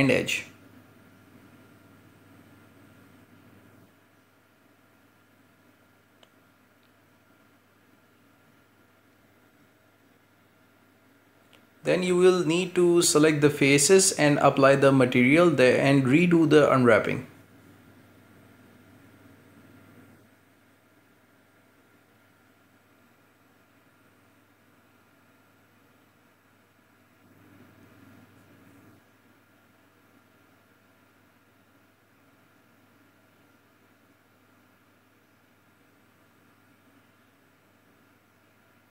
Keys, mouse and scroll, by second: 0.0-7.6 typing, 8.0-9.0 middle drag, 9.0 f, 9.2 f, 9.4 f, 10.1 shift+middle click, 10.7 scroll up 1, 11.0 shift+middle click, 11.3-12.7 scroll up 1, 12.7-14.1 drag, 14.1-15.8 middle drag, 15.8-16.9 right drag, 16.9 ctrl+space, 17.8 click, 18.5 click, 18.8 ctrl+space, 19.0-19.5 scroll up 1, 19.5-20.6 right drag, 20.7 alt+shift+right click, 21.1 shift+right click, 21.8 u, 24.4 scroll down 1, 24.7 shift+middle click, 25.3 Tab, 25.9-27.5 middle drag, 27.5 scroll down 3, 27.7-30.7 shift+middle drag, 30.7-32.1 scroll up 1, 32.1-32.8 shift+middle drag, 36.8 scroll down 1, 36.9-37.9 shift+middle drag, 37.9-38.3 scroll up 1, 38.3 shift+middle drag, 38.6 right click, 38.8 Tab.